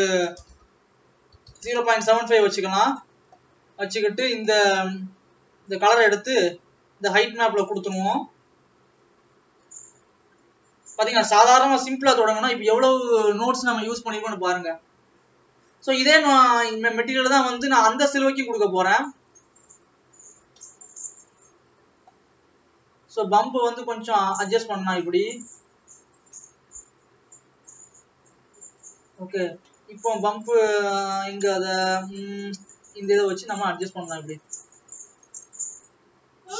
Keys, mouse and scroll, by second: 34.5 click.